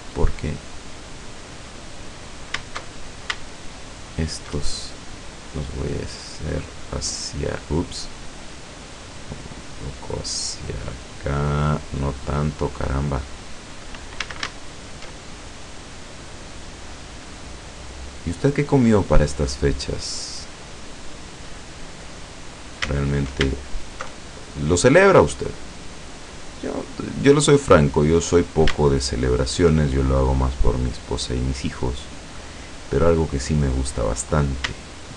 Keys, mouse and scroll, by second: 0.1 click, 0.8 click, 2.9 alt+shift+right click, 3.5 alt+shift+right click, 3.9 alt+shift+right click, 5.2-7.3 drag, 7.7-9.9 drag, 10.3-12.8 drag, 14.3 a, 14.7 alt+shift+right click, 15.6-21.7 drag, 22.6 right click, 23.0 alt+shift+right click, 23.7 alt+shift+right click, 24.4-27.7 alt+shift+drag, 28.4 right click, 28.9 alt+shift+right click, 30.0-33.4 alt+shift+drag, 34.3 right click, 34.9 alt+shift+right click.